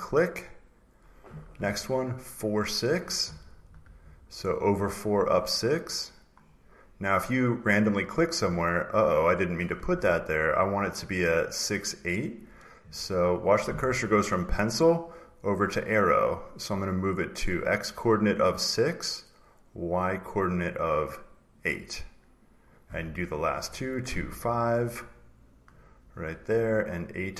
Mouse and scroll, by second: 2.6 click, 3.3-4.6 drag, 6.3 click, 7.1 click, 10.9 click, 11.2 click, 12.3 click, 21.4 click, 25.7 click.